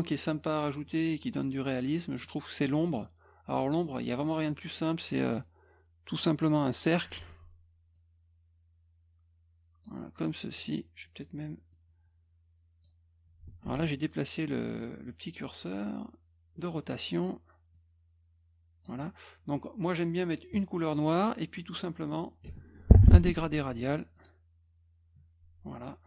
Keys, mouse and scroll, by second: 0.9 click, 2.0 middle click, 4.5-6.8 drag, 7.2 F1, 8.0-9.9 drag, 10.6 click, 11.7-12.8 drag, 13.7 ctrl+z, 15.1-16.6 drag, 17.8 click, 20.5 click, 23.0 ctrl+shift+f, 24.2 click.